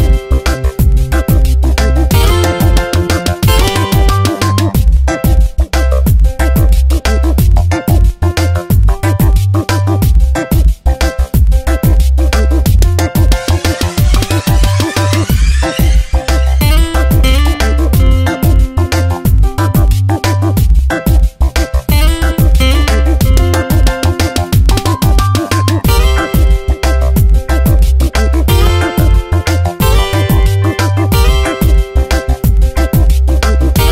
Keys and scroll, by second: 1.3 Return, 2.7 space, 5.0 ctrl+z, 19.2 alt+BackSpace, 21.0 space, 23.4 b, 29.7 x.